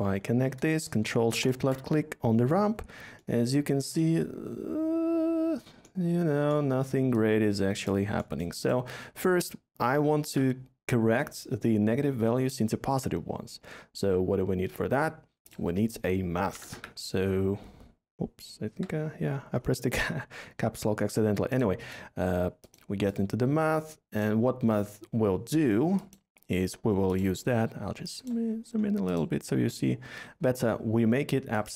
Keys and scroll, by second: 0.6 ctrl+shift+Caps_Lock, 10.1 a, 16.4-16.7 typing, 18.6 Caps_Lock.